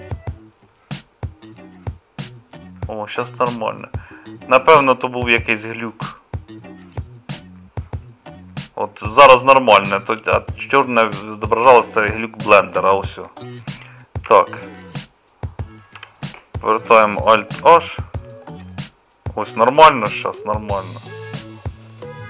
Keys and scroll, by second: 14.2 KP_Divide, 15.9 KP_Divide, 17.6 alt+h, 17.7 KP_Divide.